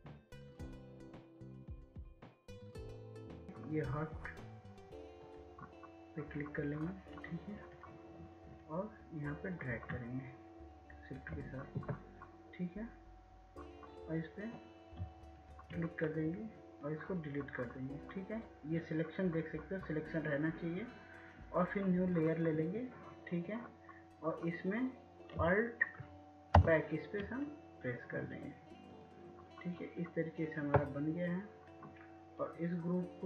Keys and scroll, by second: 26.8 alt+BackSpace.